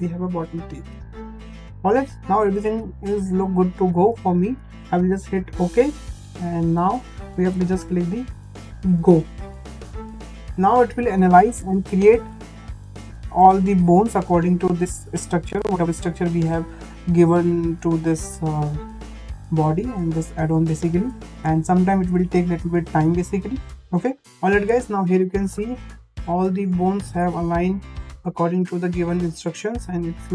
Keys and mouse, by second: 5.6 click, 7.1 shift+middle click, 8.9-24.3 drag, 25.4 middle click, 27.2 middle click, 28.0 shift+middle click, 28.5-29.7 middle drag.